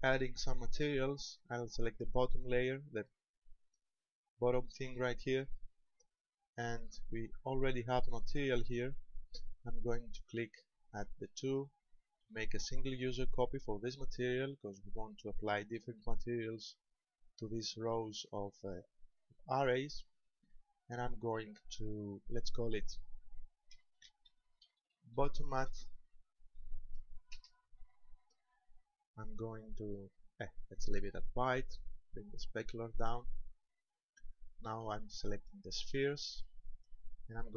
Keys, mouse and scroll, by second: 0.8 right click, 6.1 click, 14.0 click, 22.3 click, 32.4 click, 35.9 right click.